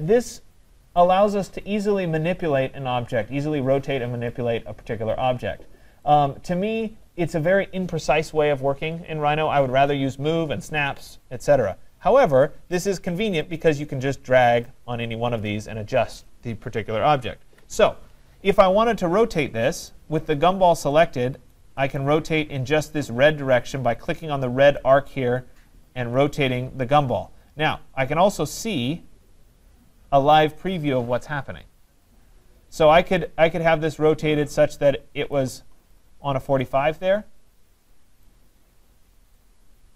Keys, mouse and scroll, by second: 6.1-11.2 right drag, 14.7-15.1 drag, 17.5 ctrl+z, 19.9 right click, 20.3 middle click, 20.3 middle click, 22.0 right click, 35.4 click, 38.3 right click.